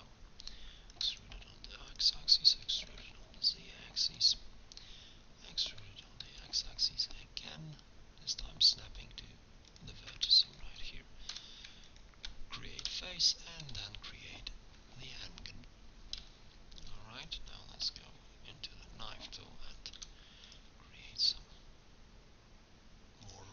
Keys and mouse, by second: 1.0 e, 2.9 e, 6.1 e, 10.5 click, 11.3 f, 12.8 f, 13.6 middle click, 17.9 k.